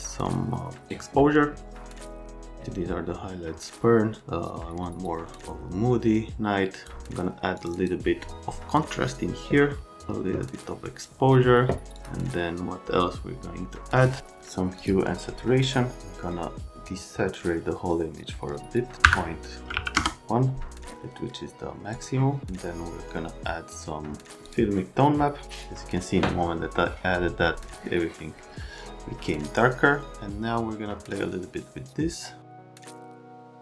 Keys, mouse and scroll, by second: 2.0 click, 7.5 click, 7.7 click, 11.9 click, 14.8 click, 16.7 click, 19.0 KP_Subtract, 19.6 KP_Decimal, 19.7 KP_1, 19.9 KP_Enter, 21.9 click, 24.5 click, 30.1-33.1 drag, 33.3-33.6 drag.